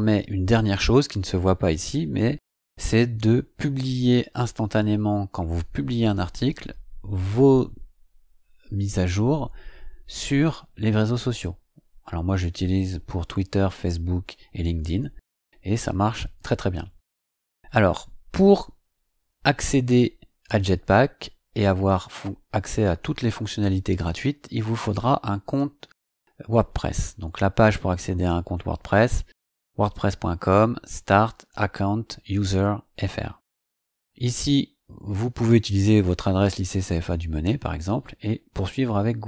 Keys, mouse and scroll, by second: 0.9-1.2 scroll up 2, 2.2-3.0 scroll up 4, 26.8 click.